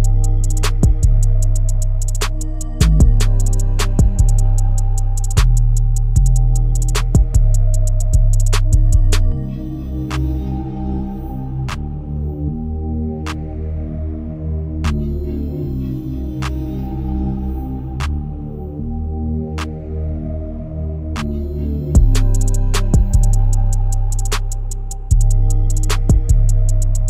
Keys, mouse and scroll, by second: 2.6-4.3 drag, 4.3 KP_2, 4.9 KP_0, 6.5-8.4 drag, 8.4 KP_0, 11.2 click, 12.7 click, 13.3 g, 15.3-17.5 middle drag, 17.5 click, 18.1 KP_1, 18.9 scroll up 1, 19.0 middle click, 19.8 shift+click, 20.1-20.5 scroll up 4, 20.5 shift+middle click, 21.2 n, 22.1 KP_Divide, 23.0 KP_1, 23.9 drag, 24.2 click, 24.7 ctrl+KP_1, 25.7 click, 26.4 Tab.